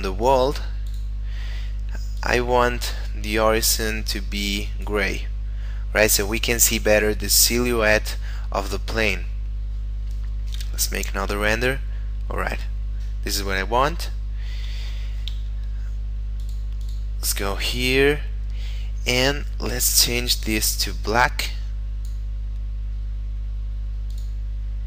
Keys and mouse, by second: 0.2 click, 10.6 F12, 13.9 middle click, 14.7 Escape, 15.6 middle click, 16.3 click, 18.1 middle click, 19.8 click, 24.1 click, 24.6 middle click.